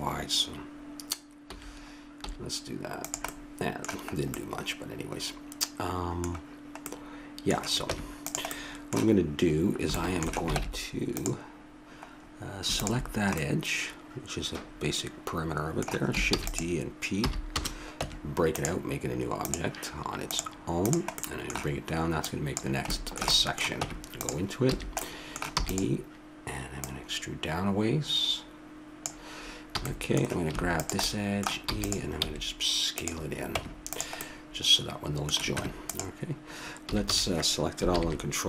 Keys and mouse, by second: 1.5 s, 3.3-5.2 middle drag, 7.9 Tab, 10.5 ctrl+Tab, 12.8-14.8 drag, 14.8 middle click, 16.3 shift+d, 17.2 p, 18.0 Tab, 19.4-20.6 right drag, 23.2 click, 23.8 Tab, 24.7 a, 25.5 e, 26.8-28.6 drag, 29.7 a, 29.9 middle click, 30.7-32.5 right drag, 31.7 e, 32.2 s, 33.6 Tab, 34.2 middle click, 35.6 Tab, 35.9 right click, 36.8 a, 37.0 a.